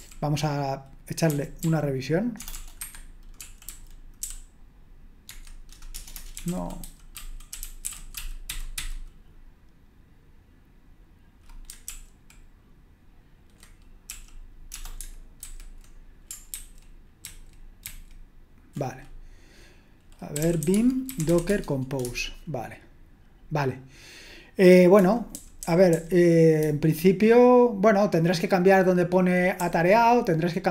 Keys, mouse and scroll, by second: 0.0-9.2 typing, 2.8 Escape, 11.9 super+l, 14.1 l, 15.4 super+h, 16.5 ctrl+c, 17.2 ctrl+c, 17.9 ctrl+c, 20.1-22.0 typing, 25.0-27.1 typing, 29.6 j.